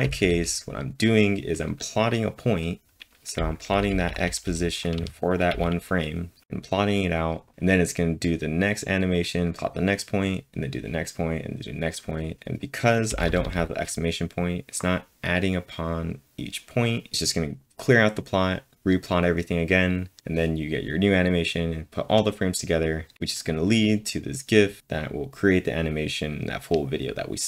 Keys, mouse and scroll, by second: 3.4 typing, 4.7-5.8 typing, 13.1-13.4 typing.